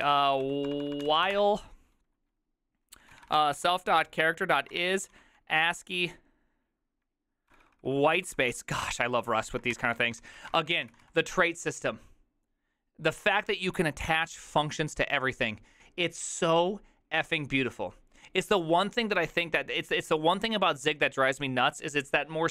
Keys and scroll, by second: 0.0-1.8 typing, 2.8-5.7 typing, 7.3-8.1 typing, 8.8 ctrl+y, 9.7-11.6 typing, 9.9 Return, 10.3 ctrl+c.